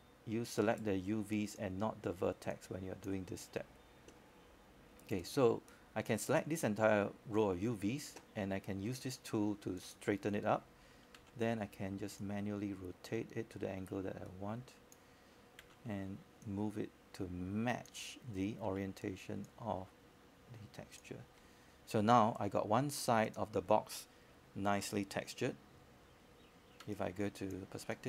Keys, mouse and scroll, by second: 8.6-10.6 right drag, 11.5 q, 12.0-13.6 right drag, 14.2-15.6 drag, 15.9 w, 15.9 w, 16.5 click, 19.6-21.6 right drag, 27.7-28.0 scroll up 1.